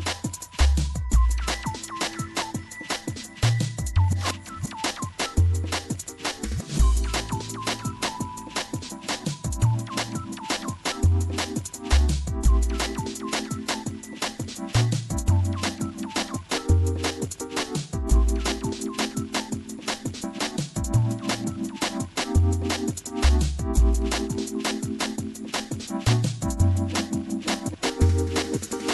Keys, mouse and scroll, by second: 1.1 w, 8.6 a, 8.9 a, 9.7 a, 10.4 a, 16.2 w, 20.6-23.5 middle drag.